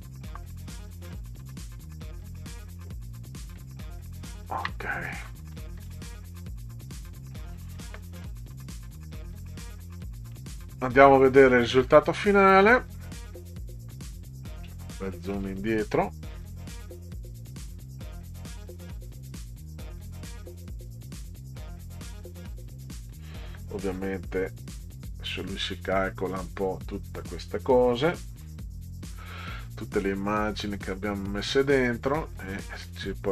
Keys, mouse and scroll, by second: 0.6 Right, 2.6 click, 3.6 middle click, 5.5 middle click, 10.0 click, 11.2-12.6 middle drag, 14.1 click, 15.1 click, 31.1 click.